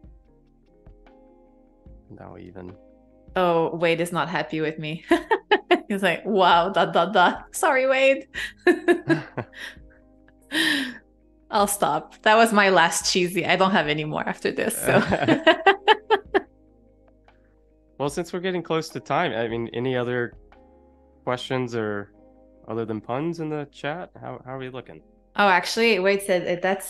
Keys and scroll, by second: 3.7 super+z, 5.3 super+z, 5.8 a, 7.5 shift+b, 8.0 ].